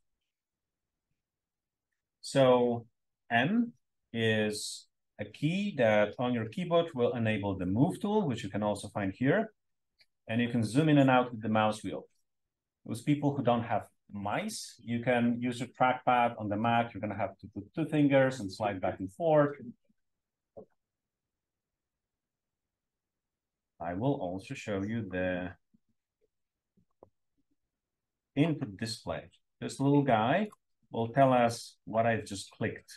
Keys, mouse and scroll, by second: 29.3-29.8 drag, 32.1-32.9 typing.